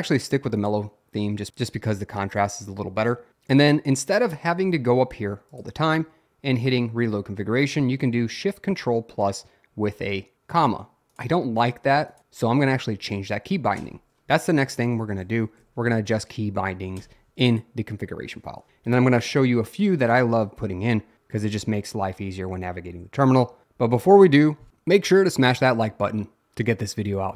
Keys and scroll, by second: 12.8 Up, 13.8 Return, 15.6 o, 17.0 Return.